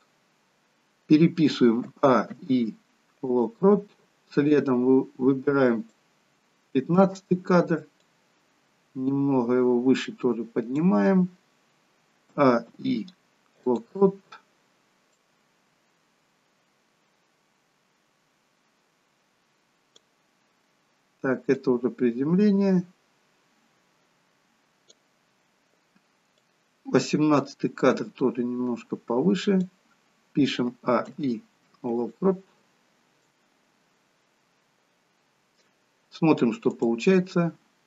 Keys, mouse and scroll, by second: 1.9 a, 2.4 i, 4.7 click, 8.0 click, 12.4 a, 12.8 i, 15.3 click, 21.7 click, 26.5 click, 30.8 a, 31.1 i, 33.4 click, 36.8 click.